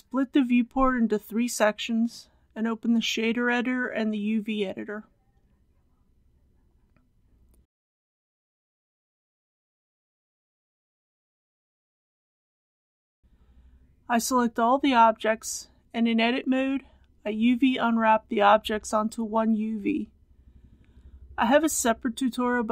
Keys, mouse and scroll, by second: 0.1-4.1 drag, 4.1-4.5 scroll down 1, 5.2 shift+middle click, 6.8 click, 10.0 n, 10.7 click, 11.8 middle click, 12.3 click, 13.1 scroll down 1, 13.2 a, 14.0 Tab, 15.6 click, 20.1 alt+click, 21.5 alt+2, 21.7 click.